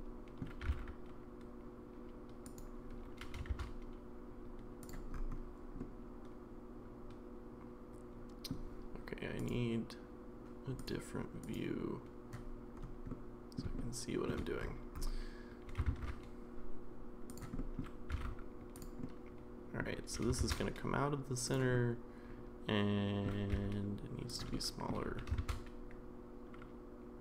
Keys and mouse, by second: 0.6 g, 3.2 g, 5.8-8.5 middle drag, 9.4 click, 10.8 click, 11.4 click, 13.1-13.6 middle drag, 13.8-14.3 shift+middle drag, 15.7 g, 17.6 middle click, 18.1 g, 19.0-19.8 middle drag, 20.3 shift+g, 21.7-23.3 middle drag, 23.5 s, 24.5 middle click, 25.1 g.